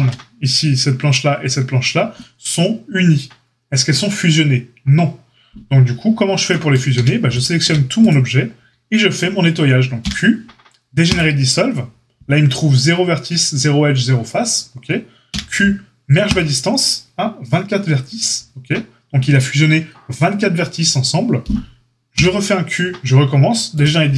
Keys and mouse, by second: 6.9 a, 7.6 a, 10.0 q, 15.2 q, 22.1 q.